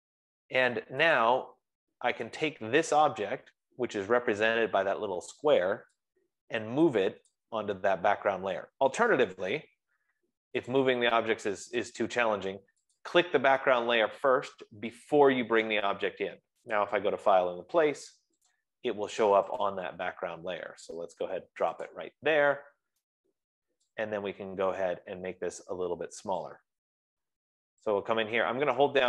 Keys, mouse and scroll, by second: 1.1 click, 1.8 click, 2.8 click, 7.8 click, 9.9 BackSpace, 11.2 click, 12.2 click, 13.6 click, 15.6 click, 17.2 click, 19.1 click, 20.4-26.7 click, 24.8-26.3 scroll, 27.0 click.